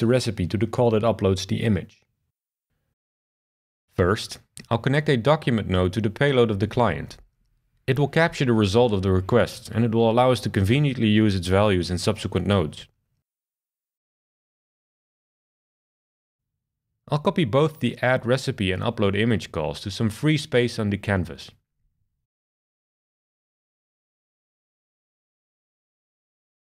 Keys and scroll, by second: 2.5 BackSpace, 9.9 shift+super+r, 19.3 super+c, 21.3 super+v.